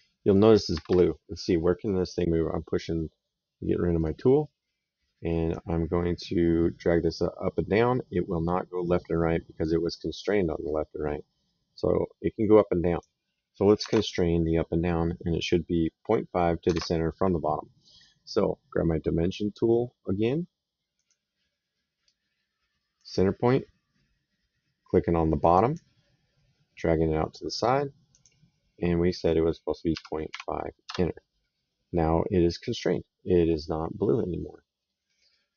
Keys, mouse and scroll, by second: 0.6 Escape, 3.8 click, 5.4 click, 13.8 alt+Tab, 16.6 Tab, 20.8 click, 22.8 click, 25.4 click, 28.0 click, 30.1 KP_5, 30.7 KP_Enter, 32.7 middle click, 34.7 middle click, 35.2 right click.